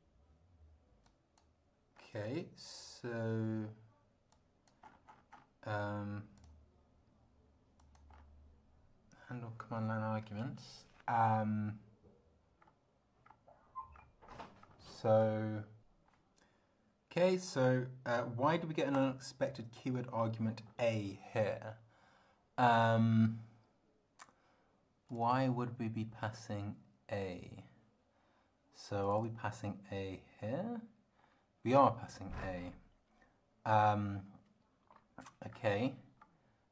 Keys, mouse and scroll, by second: 1.1 click, 2.0 scroll down 1, 4.3 click, 4.8-5.6 scroll up 1, 6.4 click, 7.8 click, 8.1 scroll up 1, 12.6 scroll down 1, 13.2 scroll down 2, 13.9-14.8 scroll down 5, 19.0 click, 20.7-21.6 scroll up 4, 25.1 click, 29.1 click, 30.5 scroll up 1, 31.2 scroll up 2, 35.5 scroll down 2, 36.2 scroll down 2.